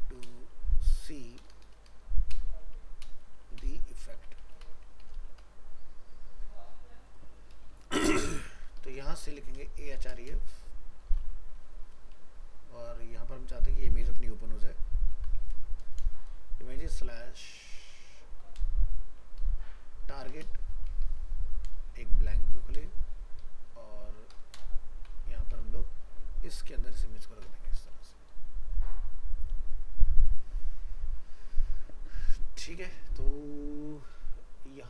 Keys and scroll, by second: 9.0 ctrl+x, 25.1 ctrl+v, 32.7 ctrl+s.